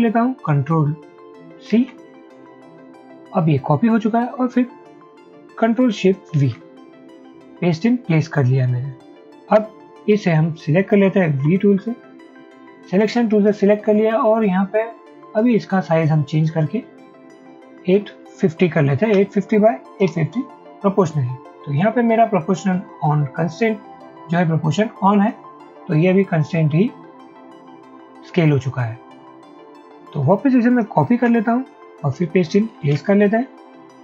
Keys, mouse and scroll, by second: 6.4 ctrl+shift+v, 11.5 v, 17.8-19.1 typing, 20.2 Return, 31.2 ctrl+c, 32.8 ctrl+shift+v.